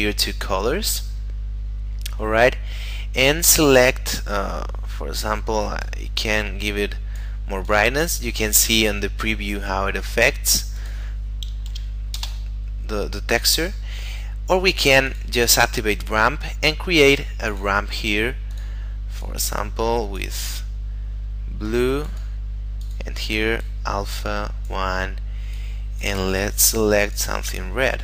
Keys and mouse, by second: 5.8 click, 10.7 click, 11.7 1, 12.1 Return, 15.1 click, 17.5 click, 21.7 click.